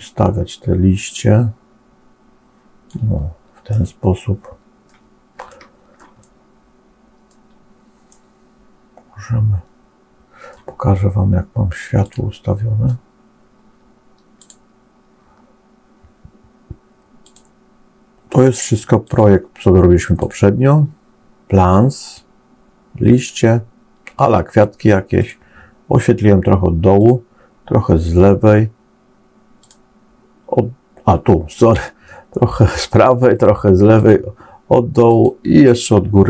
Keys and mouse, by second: 3.6-4.8 middle drag, 5.4 shift+middle click, 5.4 shift+click, 6.1-7.2 drag, 8.0-10.4 middle drag, 11.9 click, 14.2 click, 17.1 click, 18.9 click, 25.0 click, 29.5 click, 31.3 click, 35.0 click.